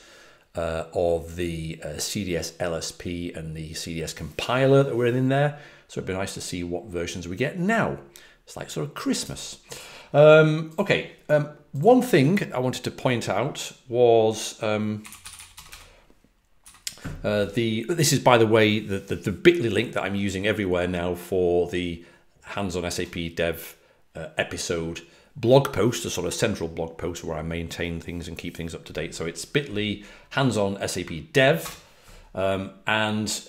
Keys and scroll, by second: 14.7-17.1 typing, 31.3-32.0 typing.